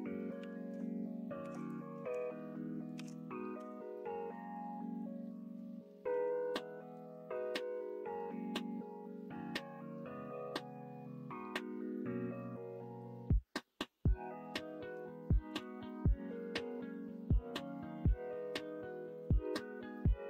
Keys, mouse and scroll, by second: 0.6 1, 1.4 1, 2.9 ctrl+b, 19.5-20.2 middle drag.